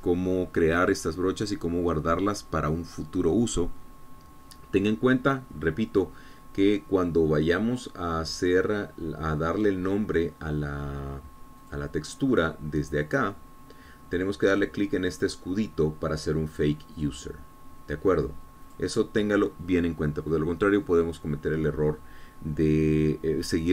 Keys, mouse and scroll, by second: 8.9 click, 10.8-11.2 scroll down 1, 13.1 click, 14.5 click, 14.9-15.3 scroll down 1, 15.3-16.2 scroll up 1, 18.5 click, 20.2 click.